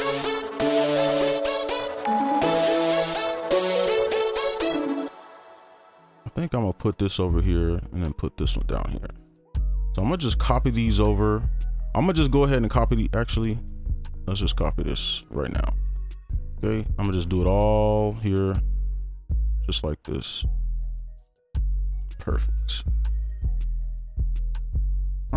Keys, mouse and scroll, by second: 5.0 space, 5.7 ctrl+click, 6.1 shift+Up, 6.3 shift+Up, 6.5 shift+right click, 6.8 ctrl+click, 7.1 shift+Down, 7.2 shift+right click, 7.8 ctrl+click, 8.2 shift+Down, 8.5 shift+right click, 8.7 ctrl+click, 9.1 shift+Down, 9.2 shift+right click, 11.5 scroll up 1, 11.7-12.4 scroll down 1, 12.4 right click, 18.2 ctrl+a, 18.6 shift+click, 21.0 ctrl+a, 21.6 shift+click, 24.2 ctrl+a, 24.6 shift+click.